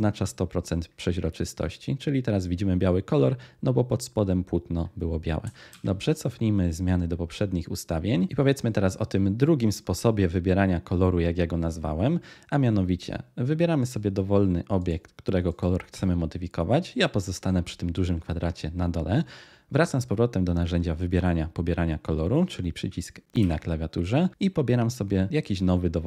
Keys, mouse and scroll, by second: 23.3 i.